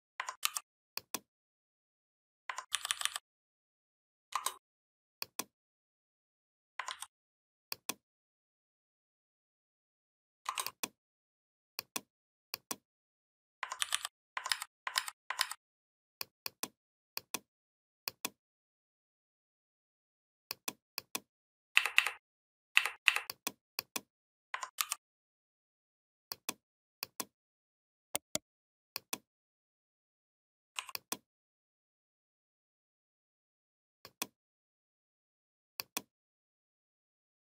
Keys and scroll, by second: 0.2 ctrl+g, 2.5 ctrl+[, 6.7 ctrl+z, 13.6 ctrl+[, 14.3 ctrl+a, 14.8 ctrl+a, 15.2 ctrl+a, 21.6 Up, 24.6 ctrl+g.